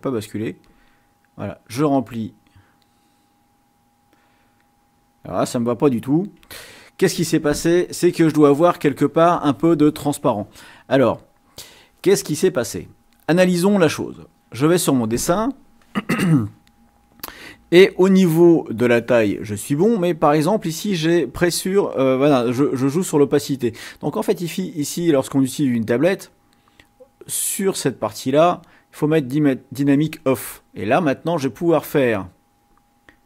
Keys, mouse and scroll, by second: 0.7 click, 6.5 ctrl+z, 14.2 click, 23.2 click, 26.9-28.7 drag, 29.2 click, 31.2-32.9 drag, 33.0 click.